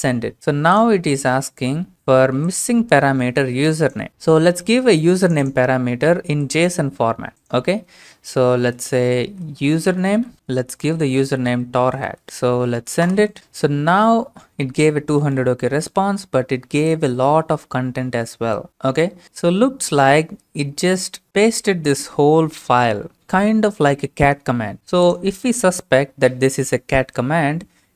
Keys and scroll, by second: 8.6 typing, 9.8-12.9 typing.